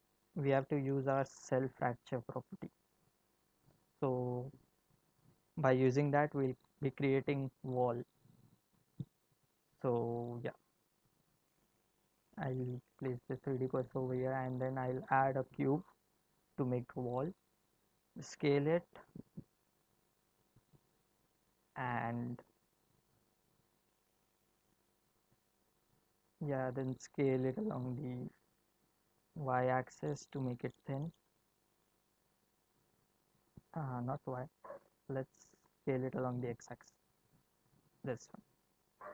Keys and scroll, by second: 14.6 shift+a, 18.2 s, 27.8 s, 36.6 s.